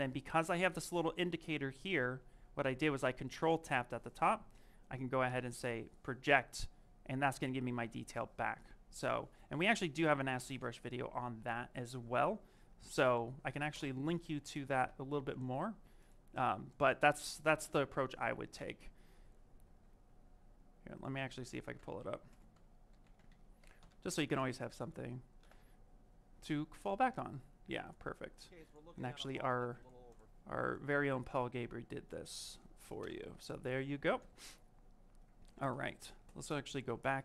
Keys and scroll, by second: 17.5 y, 18.4 Return, 25.3 Return, 32.9 Return, 36.3 ctrl+z, 36.8 ctrl+z.